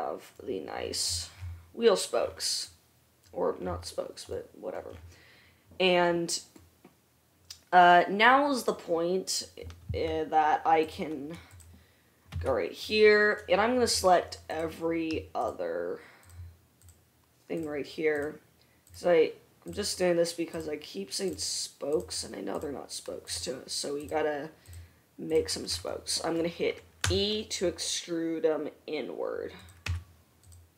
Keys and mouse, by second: 8.8-9.4 drag, 9.4 right click, 11.6 middle click, 12.2-14.8 right drag, 12.5 Tab, 14.6 click, 14.6 middle click, 15.6 shift+middle click, 15.7-25.8 shift+drag, 17.0 shift+middle click, 17.0 shift+right click, 18.3 shift+middle click, 18.3 shift+right click, 19.1 shift+middle click, 19.1 shift+right click, 20.7 shift+middle click, 20.7 shift+right click, 22.1 shift+middle click, 22.1 shift+right click, 23.5 shift+middle click, 23.5 shift+right click, 24.3 shift+middle click, 24.3 shift+right click, 25.8-29.3 right drag, 27.3 e, 30.2 Tab.